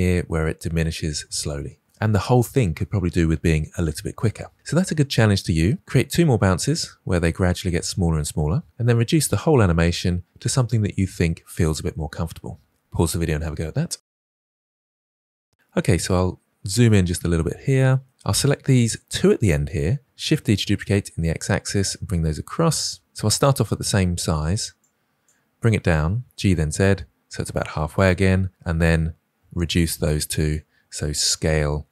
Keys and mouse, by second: 16.1 ctrl+middle click, 17.1 middle click, 18.2-18.8 drag, 20.1 shift+d, 24.9 click, 26.0 g, 30.0-30.5 drag, 31.5 s.